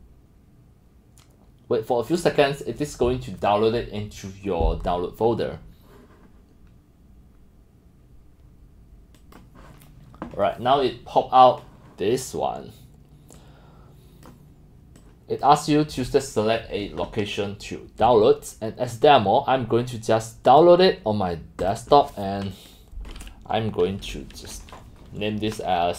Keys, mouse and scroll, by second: 2.2 click, 3.2-4.3 drag, 9.2 click, 9.6 click, 13.4-14.3 drag, 15.0 click, 15.9-18.2 drag, 18.9-20.6 drag, 21.6 click, 22.5 click.